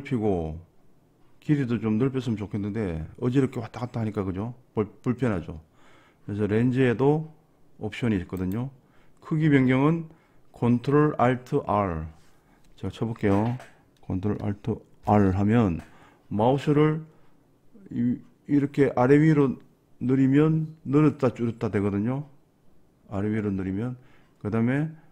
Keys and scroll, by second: 15.1 ctrl+alt+r.